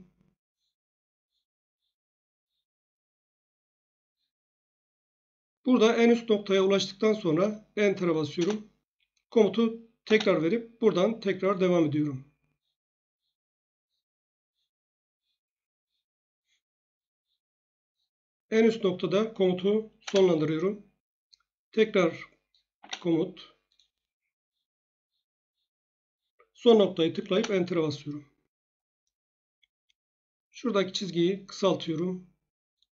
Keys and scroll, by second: 8.3 Return, 10.0 space, 20.0 Return, 22.7 space, 27.3 Return.